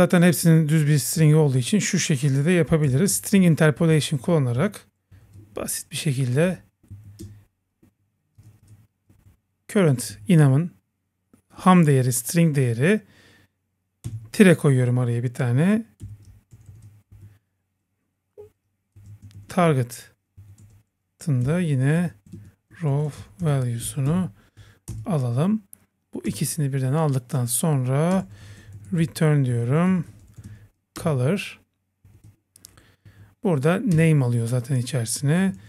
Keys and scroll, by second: 4.0 super+Right, 5.6 Left, 6.4 Left, 6.9 Right, 7.2 Return, 9.3 Right, 10.3 Right, 17.1 Left, 24.1 Right, 26.3 Return, 28.2 Return, 31.0 Return, 33.1 Down, 33.9 Return.